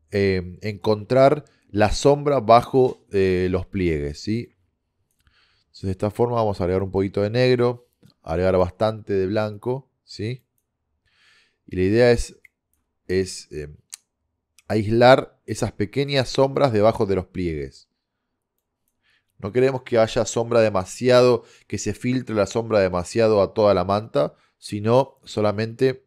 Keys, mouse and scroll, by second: 4.6-6.2 drag, 6.4 click, 8.1-9.7 drag, 17.7 middle click, 18.6-20.4 middle drag.